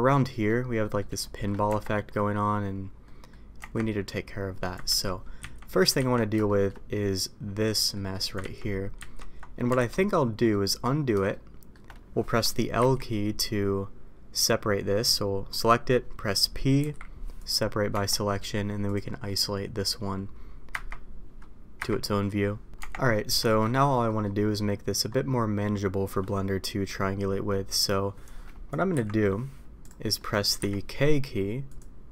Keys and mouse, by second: 0.2 middle drag, 0.8 middle click, 1.2 shift+middle drag, 1.6 Tab, 3.0 middle click, 3.5 Tab, 5.1 ctrl+z, 6.2 ctrl+z, 6.4 shift+middle drag, 7.7 middle click, 9.7 alt+a, 10.5 middle click, 11.3-11.7 shift+middle drag, 12.7 l, 16.8 p, 17.9 Tab, 18.8 click, 20.7 KP_Divide, 22.7 Tab, 23.1 middle click, 23.4 shift+middle click, 24.1 middle click, 30.1 middle click, 30.5 k.